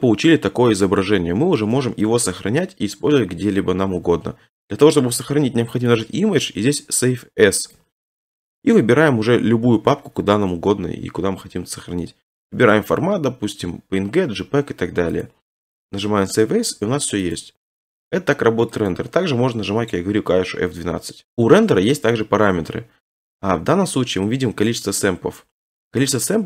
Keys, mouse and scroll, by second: 0.9 middle click, 1.0 middle click, 1.1 middle click, 1.6 middle click, 2.3 middle click, 5.9 click, 7.8 click, 12.9 click, 15.2 click, 18.9 click.